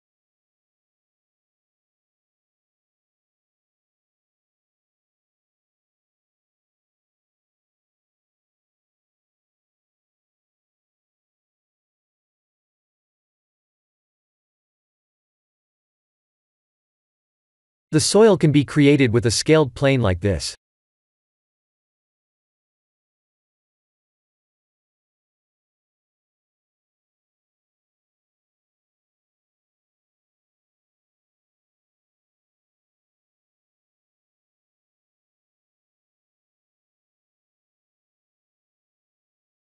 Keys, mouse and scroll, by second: 0.3 KP_1, 0.6 shift+z, 1.5 g, 4.1 e, 6.5 s, 11.6 Tab, 11.9 middle click, 12.6 shift+z, 13.0 middle click, 18.0 click, 18.4 shift+a, 21.9 KP_7, 22.8 s, 25.5 s, 28.1 middle click, 29.0 middle click, 29.4 g, 33.6 KP_1, 34.5 scroll up 2, 35.5 s, 37.3 middle click, 37.4 middle click, 37.5 middle click, 37.8 middle click, 38.0 shift+z, 38.3 middle click.